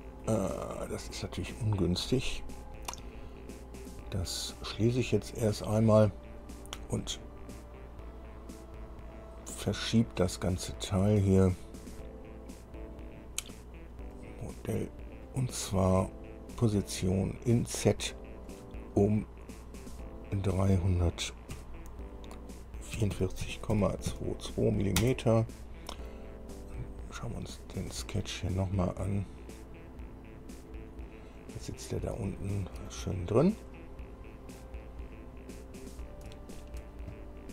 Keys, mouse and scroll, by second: 5.5 click, 7.2-7.5 scroll down 2, 11.1 click, 14.4 click, 18.7 click, 20.3 click, 21.8 KP_3, 23.2 KP_4, 23.7 KP_4, 23.7 KP_Decimal, 24.3 KP_2, 25.2 KP_Enter, 28.0 click, 29.1 scroll down 1, 29.5 scroll up 1, 30.2 scroll up 1, 30.8 scroll up 2, 31.3-32.3 middle drag, 32.4 shift+middle click, 33.4-33.8 shift+scroll down 3, 34.0-35.0 middle drag, 35.2-35.8 scroll up 2, 35.9-36.2 scroll up 2, 36.6-37.5 shift+middle drag.